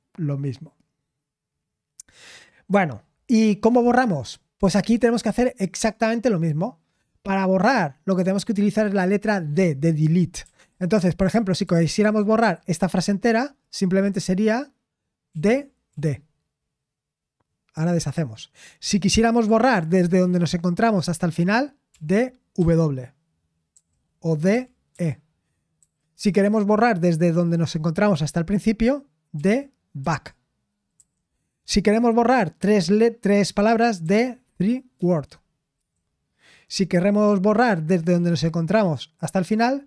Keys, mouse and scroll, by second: 12.4 typing, 21.6-22.5 typing, 23.7-25.8 typing.